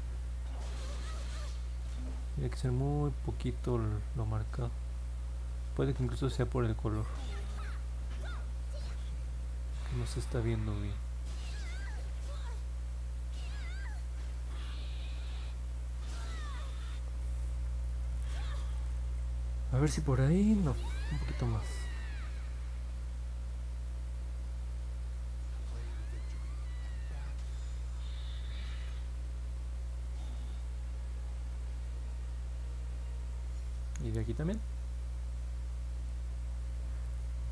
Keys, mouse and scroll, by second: 0.5 click, 1.1 click, 1.6 click, 2.0 click, 2.7 click, 3.5 click, 4.1 click, 4.6 click, 5.2 click, 5.6 click, 7.4 click, 8.0 click, 8.6 click, 9.2 click, 10.0 click, 11.0 click, 11.4 click, 12.1 click, 13.3 click, 15.6 click, 16.3 click, 17.9-18.4 scroll down 4, 18.7-19.9 alt+drag, 20.2 middle click, 20.5 middle click, 22.5 click, 23.7 click, 24.1 click, 24.5 click, 24.9 click, 25.6 click, 26.0 click, 27.9 click, 28.8 click, 29.1 click, 29.4 click, 29.7 click, 30.7 click, 31.2 click, 31.9 click, 33.0 click, 34.1 click, 34.9 click, 35.3 click, 35.6 click, 36.0 click, 36.9 click.